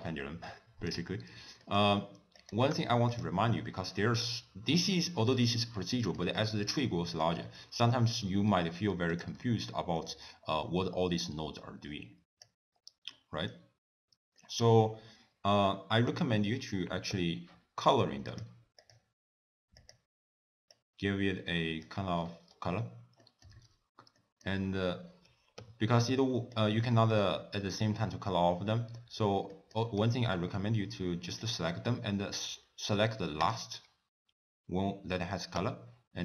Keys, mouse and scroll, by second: 0.5 click, 1.3 scroll down 1, 1.7 middle click, 2.4 click, 2.8 g, 3.6 scroll down 2, 3.8 middle click, 4.5 scroll down 2, 6.0 middle click, 6.9 middle click, 9.2 click, 10.1 ctrl+s, 11.9 click, 12.8-13.2 scroll up 2, 13.2 middle click, 13.7-14.1 scroll up 2, 14.4 middle click, 16.1 click, 17.1 n, 18.3 click, 18.8 click, 19.9 click, 23.2 middle click, 23.6-24.2 scroll down 3, 24.2 middle click, 25.7 n, 26.6 click, 27.1 click, 29.5 middle click, 31.4 shift+click, 33.4 shift+click, 35.7 n.